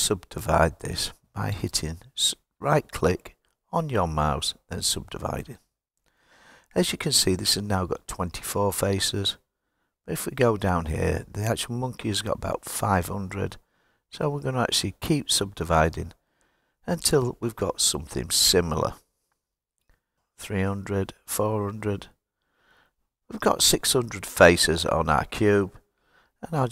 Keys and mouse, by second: 9.4 click, 12.1 click, 12.8 click, 13.6 click, 14.6 click, 15.9 click, 20.4 click, 21.6 click.